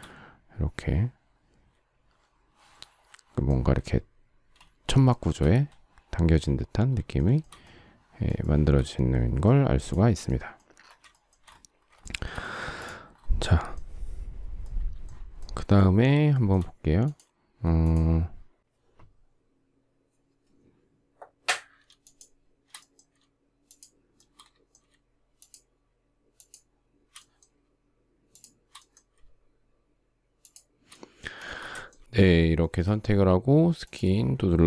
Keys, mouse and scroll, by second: 5.0 shift+middle click, 7.1 shift+middle click, 8.3 shift+middle click, 11.2 shift+middle click, 12.0 shift+middle click, 16.3 shift+middle click, 17.8 shift+click, 23.7 shift+click, 24.1 shift+middle click, 25.4 shift+click, 26.3 shift+click, 28.3 shift+click, 30.4 shift+click, 31.7 shift+middle click, 32.6 shift+middle click.